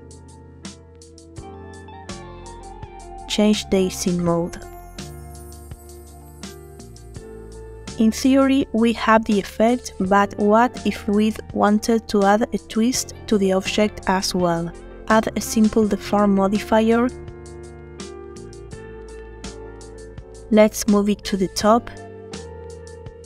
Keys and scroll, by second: 8.3 space, 14.1 space.